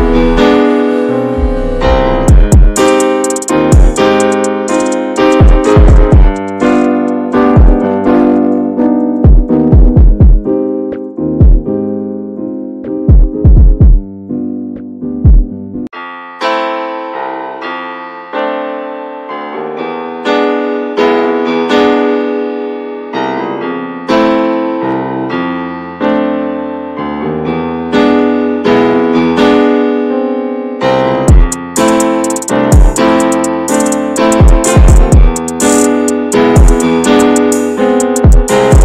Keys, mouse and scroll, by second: 0.5-0.9 scroll up 2, 0.9-3.1 middle drag, 3.1 ctrl+a, 4.4 n, 5.6 drag, 6.4 click, 6.9-7.7 drag, 8.8 click, 9.1-9.5 scroll down 1, 9.5-10.2 middle drag, 10.2 v, 10.7 n, 11.0 click, 11.3 Tab, 11.5-14.2 middle drag, 14.7 middle click, 15.0 Tab, 15.4-15.9 shift+middle drag, 15.9 scroll up 2, 16.1 shift+middle click, 16.6 Tab, 17.3 3, 17.5 click, 18.1 middle click, 18.6 l, 19.2 alt+middle click, 20.2 s, 22.0 s, 24.2-25.5 alt+middle drag, 25.5 3, 25.8 click, 26.2 shift+middle click, 26.9 3, 27.1 click, 28.0 click, 28.4 alt+middle click, 29.4 scroll down 1, 29.7 shift+middle click, 30.2 click, 32.0 shift+middle click, 32.2-32.7 scroll down 2, 32.7 click, 35.5-36.9 shift+middle drag, 36.9 click, 37.6 click, 37.9 alt+middle click, 38.4 scroll down 2, 38.6 shift+middle click.